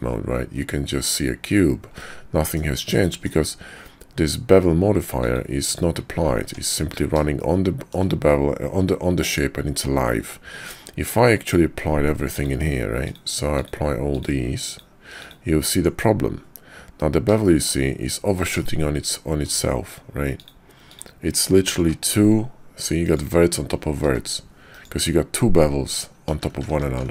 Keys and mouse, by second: 2.0 click, 3.0 shift+click, 5.1 click, 5.7 click, 6.4 Tab, 6.5 middle drag, 7.4-7.9 shift+middle drag, 12.3-13.1 drag, 13.6-14.1 drag, 14.6-15.3 drag, 15.7 Tab, 17.4 shift+click, 18.6 shift+click, 21.7 g, 24.0 g, 26.3 ctrl+z, 26.5 ctrl+z, 26.7 ctrl+z, 26.9 ctrl+z, 27.0 ctrl+z.